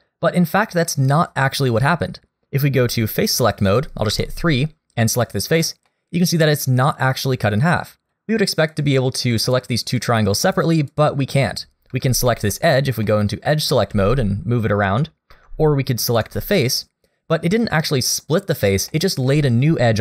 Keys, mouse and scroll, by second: 4.1 3, 5.1 click, 5.9 middle click, 8.1 click, 8.7 click, 9.4 click, 10.0 click, 10.4 click, 10.9 click, 11.9 2, 12.6 click, 13.0 middle click, 13.9 g, 16.2 3, 16.5 click, 18.9 middle click.